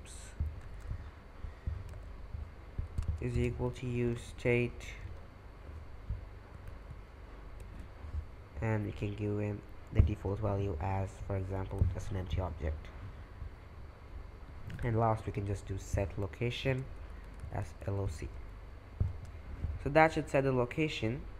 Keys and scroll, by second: 0.0-1.9 typing, 3.0-5.5 typing, 6.5 Return, 7.6 shift+9, 11.6 shift+[, 14.7 Return, 15.0-18.5 typing, 18.6 Escape.